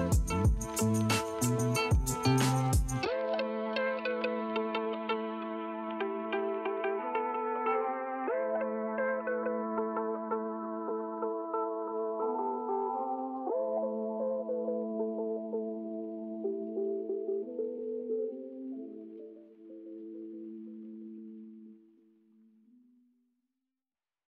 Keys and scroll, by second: 0.3 ], 1.4 space, 3.5 ctrl+alt+z, 3.7 space, 4.1 2, 5.5 ], 7.3 space, 8.2 space, 8.5 [, 9.0 space, 10.2 space, 13.5 space, 15.5 space, 16.7 space, 17.9 space, 18.1 l, 19.1 space, 22.5 space.